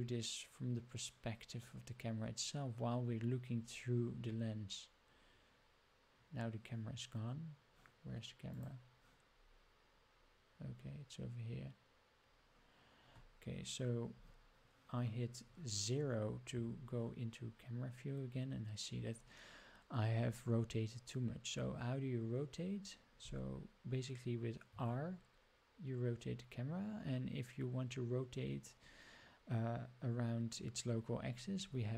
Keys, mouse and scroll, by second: 2.7-3.6 scroll up 4, 3.6-4.1 scroll up 2, 4.1 scroll down 2, 4.4 middle click, 5.1 scroll down 1, 5.2 middle click, 7.2 scroll down 1, 7.3 middle click, 8.5 click, 9.3 scroll down 2, 10.1-10.4 scroll up 4, 10.7 scroll down 2, 11.5 scroll down 2, 11.8 scroll up 1, 16.5 KP_0, 18.1 scroll down 1, 18.5 scroll up 1, 24.6 r.